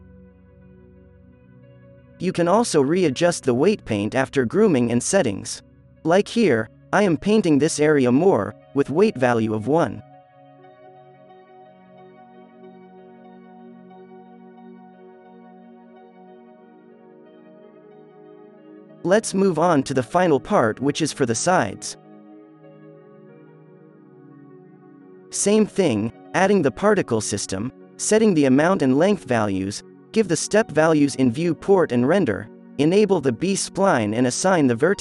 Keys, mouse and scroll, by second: 0.3 f, 0.8 f, 1.7 f, 7.1-9.1 drag, 7.4-8.8 right drag, 11.0-12.7 drag, 11.7 alt+a, 12.2 z, 14.3 click, 15.2 alt+a, 15.7 alt+a, 16.0 z, 18.9-24.6 drag, 18.9 z, 24.0 KP_0, 24.9-32.1 drag, 32.5-35.0 drag.